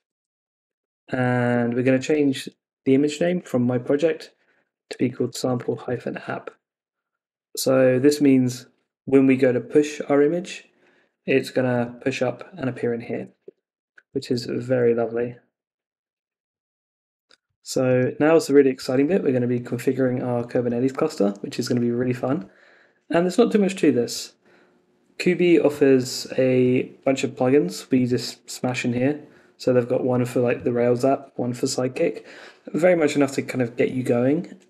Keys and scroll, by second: 0.0 Left, 1.4 Left, 1.5 Escape, 1.9 Left, 5.8 Escape, 6.5 Down, 13.1 super+Tab, 13.4 Escape, 14.4 Down, 15.1 super+s.